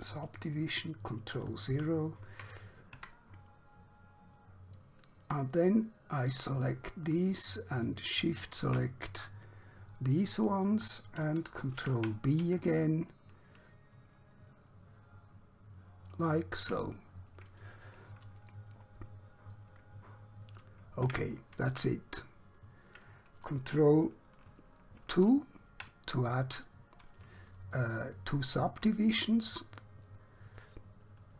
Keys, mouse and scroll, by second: 1.7 ctrl+0, 3.1 Tab, 4.0 scroll up 1, 6.4 alt+click, 8.0 alt+shift+click, 9.4 scroll down 1, 10.0-10.7 scroll up 1, 11.8 ctrl+b, 16.2 shift+click, 17.1 scroll down 1, 18.6 middle click, 21.2 Tab, 22.3 shift+middle click, 25.2 ctrl+2, 27.0 scroll up 1, 27.8 shift+middle click, 29.4 middle click.